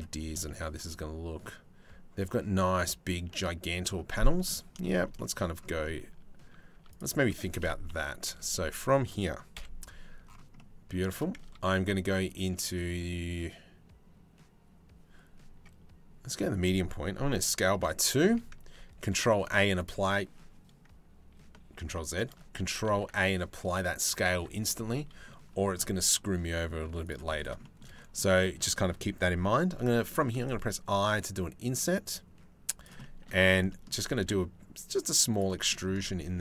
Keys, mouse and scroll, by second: 4.4 shift+middle click, 4.8 click, 5.4 click, 6.0 Tab, 6.3 Tab, 6.5 click, 6.9 Tab, 7.5 KP_3, 7.9 KP_1, 9.1 KP_Decimal, 9.2 KP_3, 11.0 Tab, 11.9-14.6 drag, 15.9 s, 18.6 ctrl+a, 21.4 ctrl+z, 22.5 ctrl+a, 23.9 Tab, 26.5 3, 27.5 middle click, 28.0 shift+middle click, 29.9 i, 32.6 middle click, 33.3 click, 33.8 e, 35.1 click, 35.9 1, 36.1 click.